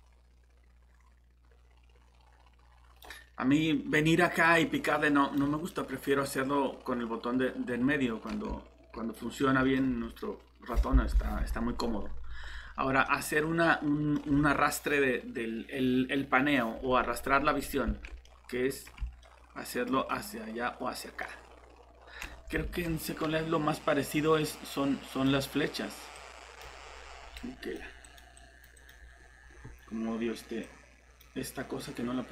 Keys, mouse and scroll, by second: 2.5 typing, 5.7 middle click, 8.5-9.5 typing, 19.5 typing, 22.6 alt+shift+Tab, 24.7 click, 27.8 typing, 28.9 typing.